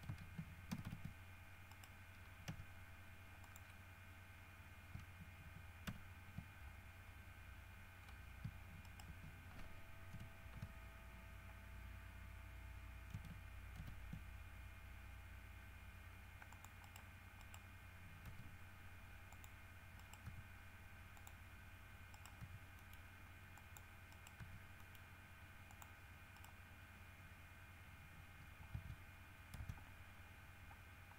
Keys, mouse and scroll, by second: 0.9 ctrl+c, 1.9 right click, 2.7 e, 3.7 click, 6.1 ctrl+v, 9.0 shift+right click, 10.3 shift+h, 14.0 ctrl+r, 15.4 scroll up 2, 16.1 scroll up 1, 16.7 click, 17.0 right click, 17.6 right click, 18.5 g, 19.5 click, 20.2 right click, 20.5 g, 21.4 click, 22.3 right click, 22.6 g, 23.0 middle click, 23.8 click, 24.3 right click, 24.6 g, 25.0 middle click, 25.9 middle click, 26.5 right click, 28.9 Tab, 29.4 scroll down 1, 29.8 Tab.